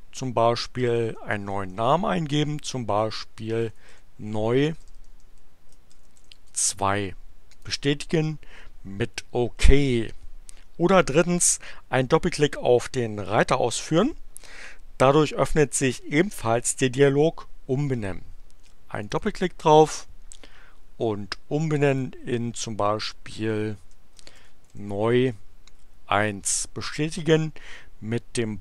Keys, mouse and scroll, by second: 0.1 BackSpace, 0.9 BackSpace, 3.4-7.1 typing, 7.5 click, 18.9 click, 21.6 click, 23.0 BackSpace, 24.4 shift+e, 24.7 shift+u, 25.0 shift+space.